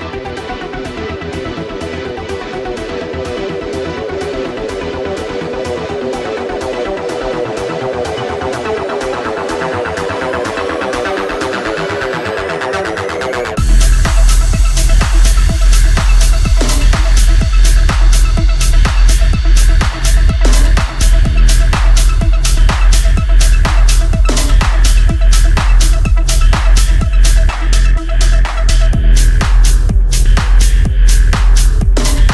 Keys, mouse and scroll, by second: 4.2-4.9 scroll down 1, 4.9 scroll up 1, 6.8-9.0 drag, 9.0-13.1 drag, 13.5 scroll down 1, 14.7 scroll up 1, 15.3 click, 18.9 scroll up 1, 23.1 scroll down 1, 24.7 click, 27.7 scroll up 1.